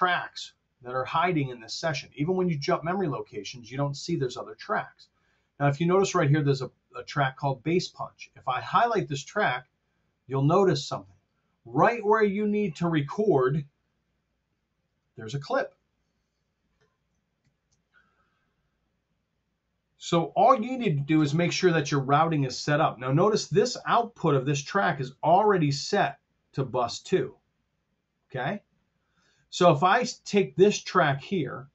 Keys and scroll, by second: 15.4 t, 17.3 ctrl+alt+super+Down.